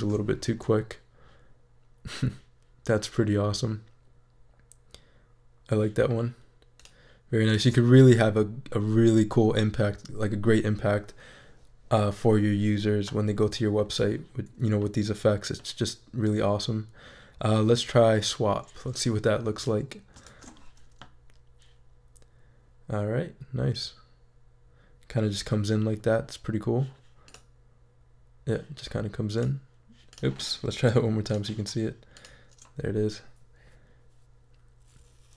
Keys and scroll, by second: 0.0 shift+super+e, 20.2 shift+super+e.